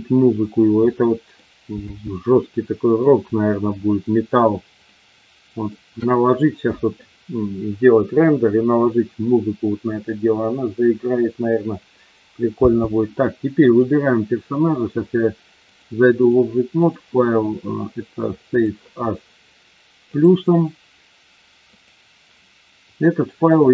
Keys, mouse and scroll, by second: 0.8-1.3 middle drag, 1.8 space, 2.3-3.1 middle drag, 4.8-5.7 middle drag, 12.6 space, 13.6 click, 15.7-16.3 drag, 16.8-19.0 drag.